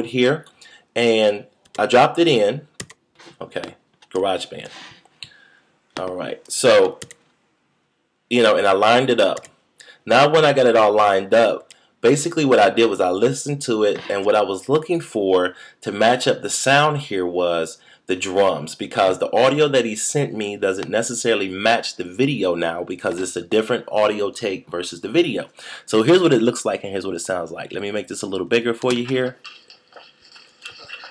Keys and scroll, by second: 7.0 shift+super+z.